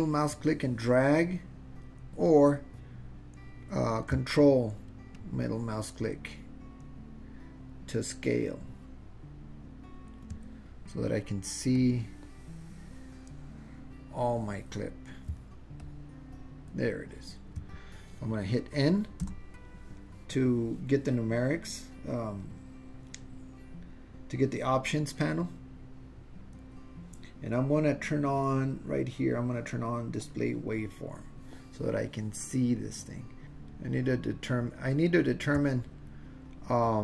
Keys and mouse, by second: 5.2-10.1 ctrl+middle drag, 11.8-14.2 middle drag, 15.8-17.5 ctrl+middle drag, 19.3 n, 28.1-29.3 drag, 30.4 click, 33.8-35.3 ctrl+middle drag, 36.4-37.0 middle drag.